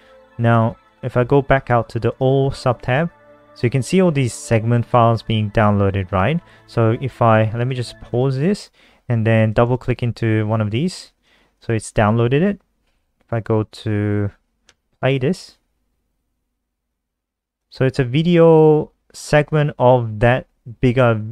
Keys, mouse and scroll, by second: 9.4 click, 11.3 super+w, 12.5 Down, 14.4 Return, 17.4 click.